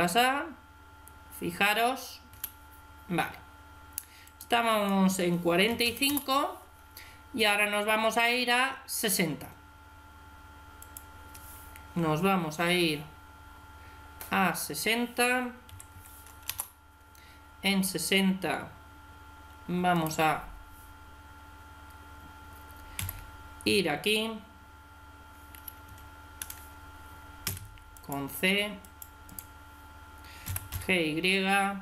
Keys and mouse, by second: 2.2 Escape, 4.1-6.6 drag, 10.7-12.5 drag, 19.8 right click, 22.8 g, 27.3 c, 29.2 right click, 30.3 g.